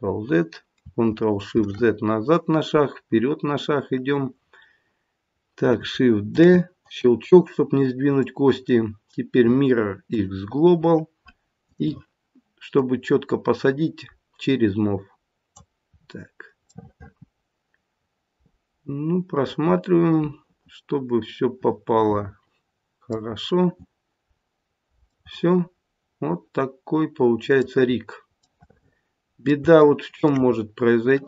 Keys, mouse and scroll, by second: 1.5 ctrl+shift+z, 6.3 shift+d, 8.1 right click, 11.6 click, 12.8 click, 15.9-16.7 scroll up 3, 16.7-17.5 scroll up 2, 21.3 middle click, 23.3-24.2 scroll down 1, 24.2 scroll down 2, 25.2 middle click, 27.9-28.3 scroll up 1, 28.6 middle click, 28.8 middle click, 29.8 shift+middle click, 30.5-31.2 scroll up 3.